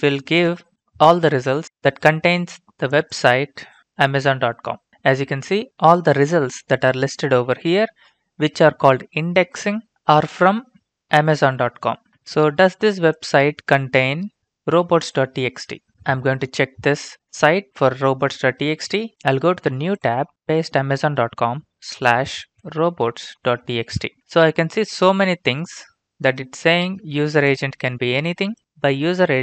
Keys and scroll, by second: 13.6 ctrl+c, 24.0 ctrl+v, 24.0-25.0 typing, 24.2 Return, 26.1-26.8 typing.